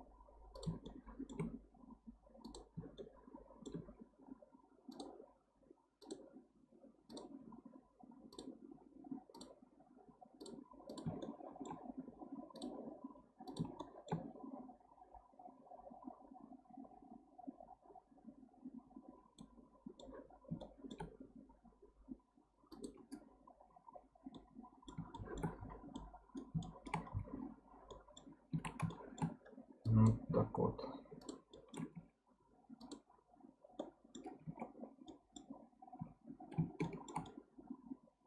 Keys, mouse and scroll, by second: 11.2-13.7 shift+middle drag, 13.7-16.8 scroll up 2, 16.8-19.4 scroll down 1, 19.4 middle click, 20.3-20.6 scroll up 2, 20.6-23.6 shift+middle drag, 23.9-24.3 scroll down 1, 24.3-25.6 middle drag, 25.6 scroll down 5, 25.9-27.0 middle drag, 27.0-27.9 scroll up 2, 27.9-28.6 middle drag, 28.6 1, 28.9-29.8 shift+middle drag, 29.8 click, 31.2 shift+drag, 31.5-31.9 shift+middle drag, 31.9 x, 33.3-33.8 scroll down 1, 33.8-34.4 middle drag, 34.4 alt+z, 34.8 scroll down 2, 35.1-36.0 middle drag, 36.0 Tab, 36.8-38.2 shift+middle drag.